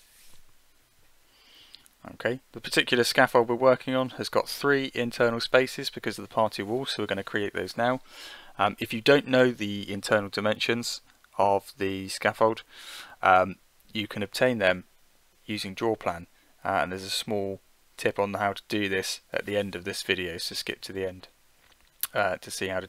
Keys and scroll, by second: 0.0 9, 6.2 8, 6.7 ., 7.2 5, 10.1 9, 13.2 1, 13.7 ., 14.4 8, 19.5 9, 19.8 ., 20.4 5.